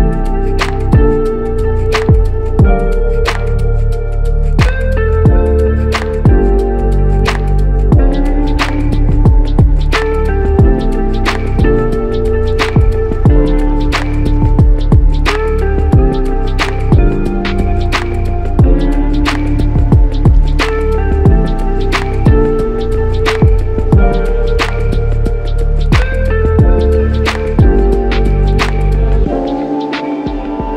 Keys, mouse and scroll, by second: 0.1 ctrl+click, 4.3-5.6 typing, 6.1 double click, 15.0 shift+click, 20.7 shift+click.